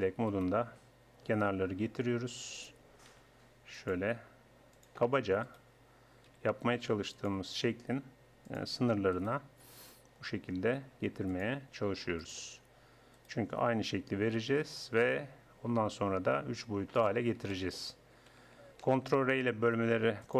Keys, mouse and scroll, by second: 0.3-1.3 drag, 1.3 g, 3.1 r, 4.4 g, 5.5-7.3 drag, 6.3 r, 7.6 g, 9.2-10.9 drag, 9.7 g, 11.8 r, 13.2-15.0 drag, 14.4 g, 17.5-18.8 drag, 18.8 ctrl+r.